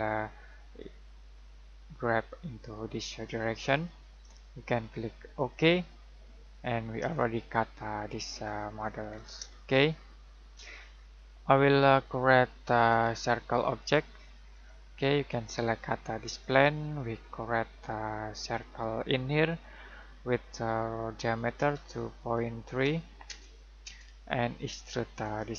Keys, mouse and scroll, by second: 1.4 click, 6.2 middle click, 6.7-7.0 scroll down 1, 7.0-8.3 scroll up 1, 8.3 scroll down 1, 8.4 scroll up 1, 9.6 middle click, 11.1 click, 12.7 click, 19.5 click, 21.5-23.2 typing, 23.2 Return, 25.2 click.